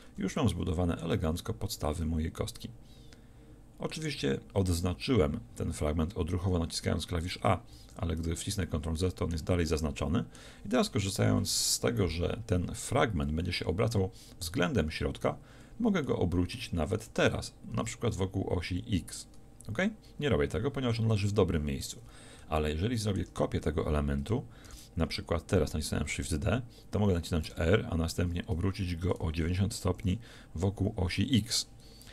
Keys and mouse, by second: 0.1 a, 7.8 ctrl+z, 17.1 r, 24.7 shift+d.